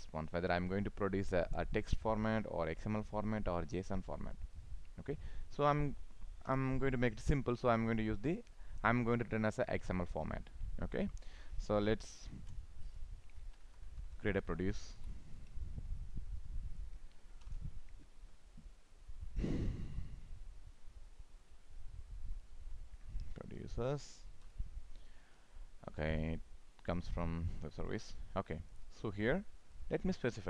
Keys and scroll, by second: 17.4 ctrl+shift+o, 24.4 ctrl+shift+o.